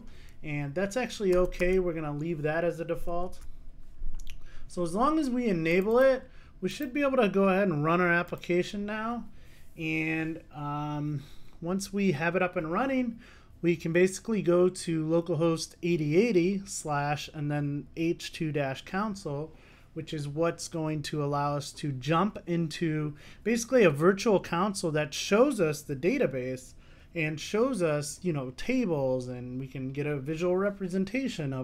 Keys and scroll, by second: 3.3 super+s, 8.4 ctrl+shift+r.